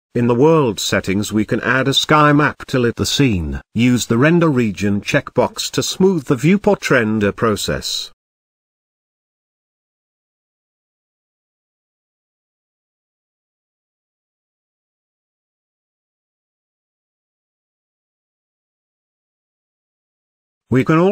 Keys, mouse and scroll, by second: 0.0 click, 1.2 click, 7.3 click, 8.1 click, 20.5 shift+a.